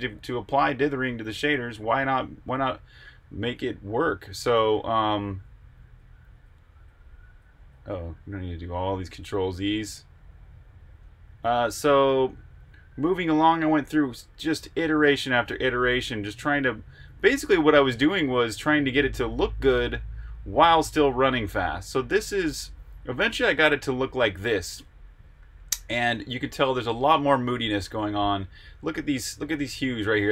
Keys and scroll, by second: 4.6 super+z, 7.7 super+z.